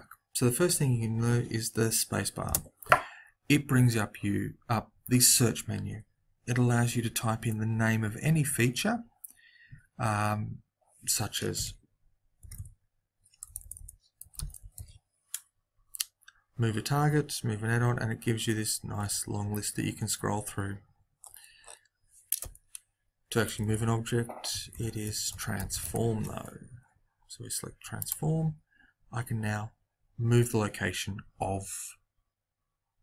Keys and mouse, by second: 13.6 BackSpace.